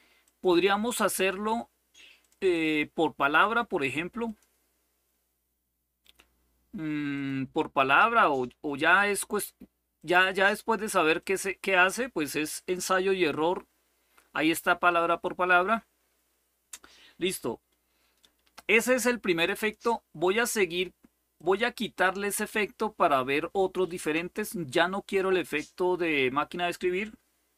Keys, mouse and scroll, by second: 0.0 click, 1.9 click, 4.0 click, 5.8 click, 6.9 click, 7.4 click, 8.0 click, 9.7 click, 10.9 click, 15.0 click, 19.1 click, 21.1 click, 23.6 click, 25.0 click.